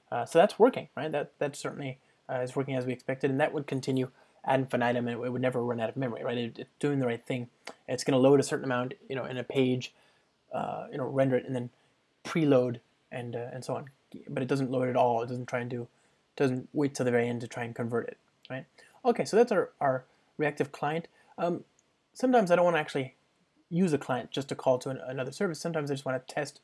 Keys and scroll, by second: 21.0 super+F2.